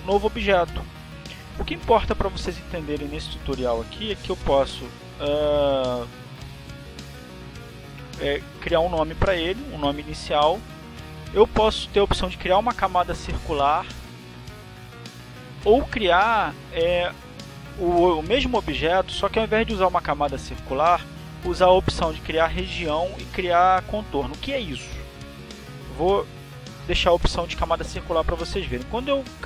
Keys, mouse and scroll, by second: 7.6 click, 9.4-10.7 typing, 28.7 click, 29.1 click.